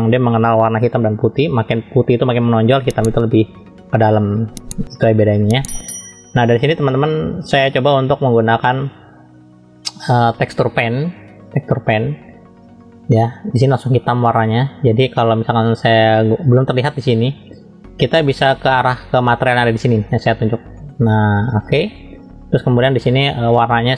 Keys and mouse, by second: 10.9-12.7 drag, 20.8 click.